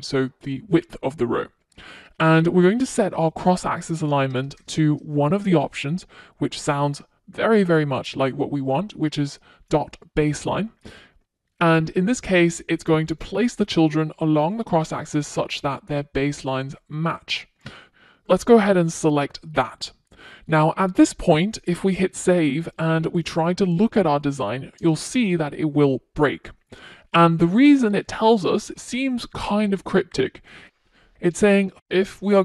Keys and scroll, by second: 28.8 super+s.